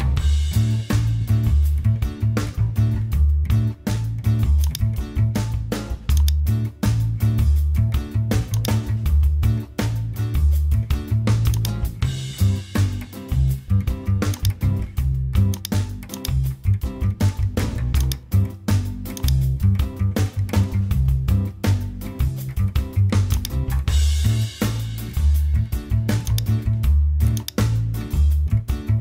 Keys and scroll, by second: 1.4 Return, 28.6-29.0 typing.